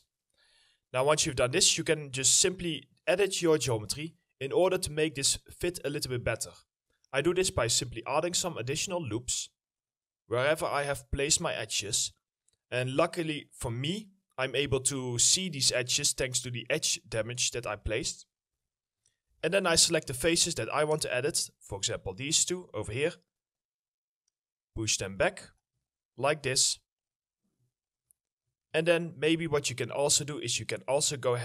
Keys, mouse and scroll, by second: 2.0 alt+middle click, 2.4 alt+scroll up 2, 2.9 middle click, 3.8 scroll up 1, 4.2 alt+middle click, 17.9 w, 18.3 middle click, 18.9 4, 20.7 ctrl+click, 21.2 middle click, 21.6 alt+middle click, 21.9 scroll down 1, 22.2 middle click, 22.6-25.7 scroll up 1, 27.8 middle click, 28.0 scroll down 1, 28.2 alt+middle click, 28.7 alt+middle click, 29.2-29.9 scroll up 1, 30.8 alt+middle click.